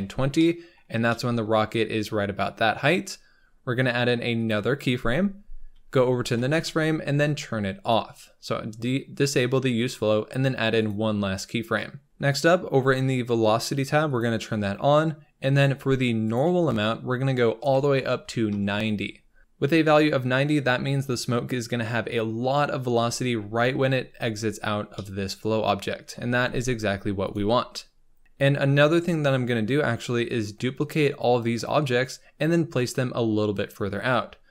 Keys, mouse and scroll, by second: 0.1 scroll down 6, 0.3 middle click, 0.9 scroll down 4, 1.1-3.0 middle drag, 3.0-4.3 scroll up 1, 4.3-6.1 drag, 6.1 Right, 7.7 click, 10.7-19.4 drag, 19.4-20.3 scroll down 3, 23.4-24.9 scroll up 3, 24.9-26.1 middle drag, 26.1 scroll up 1, 26.3 g, 27.5-28.2 scroll down 4, 28.2 KP_7, 28.6-30.4 scroll up 5, 32.0-34.3 scroll down 1, 34.3 scroll down 3.